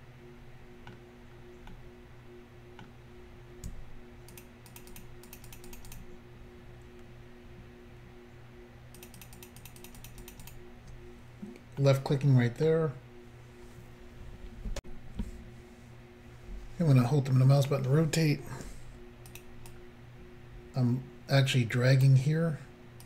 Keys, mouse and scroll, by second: 1.3-1.7 scroll down 1, 1.7 middle click, 4.4 shift+click, 4.7 shift+click, 4.8 shift+double click, 4.9 shift+click, 5.0 shift+click, 5.3 shift+click, 5.4 shift+double click, 5.5 shift+click, 5.6 shift+click, 5.7 shift+click, 5.8 shift+double click, 5.9 shift+click, 6.0 shift+click, 9.0 shift+click, 9.1 shift+click, 9.2 shift+click, 9.3 shift+click, 9.4 shift+click, 9.5 shift+double click, 9.6 shift+click, 9.7 shift+click, 9.8 shift+click, 9.9 shift+double click, 10.0 shift+click, 10.1 shift+click, 10.2 shift+click, 10.3 shift+double click, 10.5 shift+click, 10.5 shift+click, 11.8 middle click, 14.8 Insert, 17.0 middle click, 19.3 shift+click, 19.4 shift+click, 19.7 shift+click.